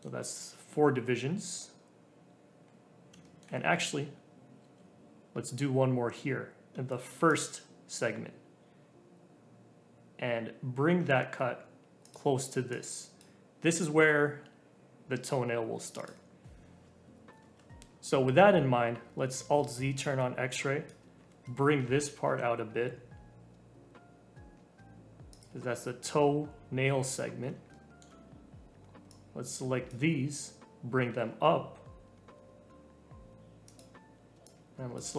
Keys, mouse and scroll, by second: 0.1 scroll down 2, 2.5 scroll up 1, 3.2 shift+middle click, 3.6-4.6 scroll up 1, 4.6 ctrl+r, 12.7 click, 15.9 click, 17.4 alt+z, 20.0 click, 21.1 g, 26.3-27.7 scroll up 1, 27.7-29.0 shift+middle drag, 29.0 click, 30.8 g, 34.4 click.